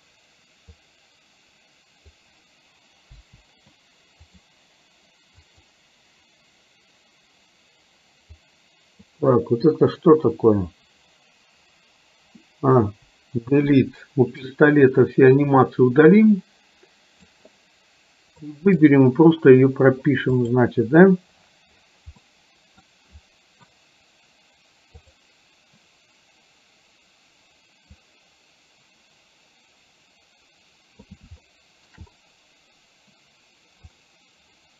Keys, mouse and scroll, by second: 0.9-2.3 drag, 3.3 Delete, 4.5 click, 5.4 click, 8.4-9.3 drag, 12.9 Delete, 14.6-17.4 drag, 18.5-18.9 middle drag, 22.3-22.9 middle drag, 25.1 click, 28.1-31.3 drag, 31.5 shift+middle click, 34.1-34.7 drag.